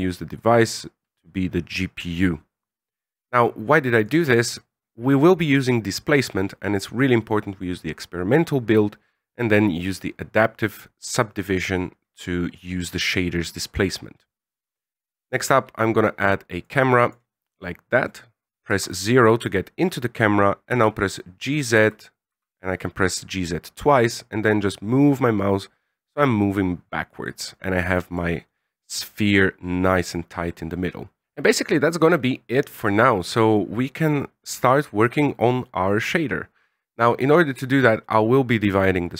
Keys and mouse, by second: 3.1 click, 10.6 click, 15.3 shift+a, 18.7 KP_0, 20.7 g, 37.9-39.1 drag.